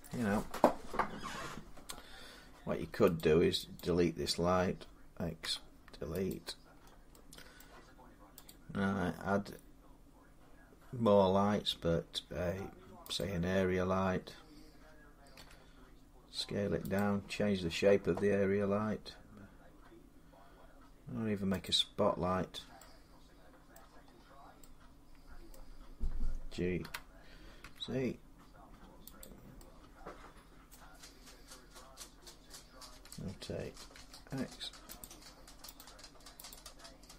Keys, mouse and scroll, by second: 3.0 click, 3.8 click, 4.1 scroll down 6, 5.2 x, 6.1 click, 6.6 scroll down 5, 7.4-10.7 middle click, 7.7 scroll, 8.2 click, 13.0 click, 15.1 s, 16.8 click, 20.2-22.2 drag, 22.2-23.3 scroll down 4, 23.5 middle click, 23.8-24.4 scroll up 7, 25.3-28.7 middle click, 25.3-26.6 scroll down 3, 26.6-27.4 typing, 29.0 click, 30.5 middle click, 32.7 r, 33.7 z, 34.8 click, 35.5 click, 36.3 click.